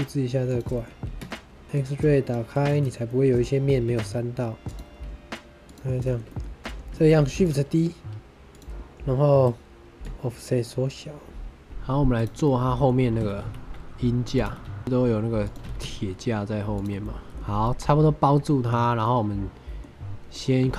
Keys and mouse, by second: 0.4 click, 0.7 middle click, 1.0 Tab, 1.8 click, 2.6 shift+middle click, 3.0 middle click, 3.8 x, 5.9 shift+middle click, 6.2 middle click, 6.9 shift+middle drag, 7.3 shift+d, 7.3 click, 8.5 click, 10.0-11.6 shift+drag, 12.1 click, 12.4-12.8 drag, 14.2 click, 14.3-15.5 typing, 15.3 click, 16.6 shift+click, 17.1 middle click, 17.5-18.7 middle drag, 18.9 middle click, 20.3 middle click, 20.6 ctrl+r.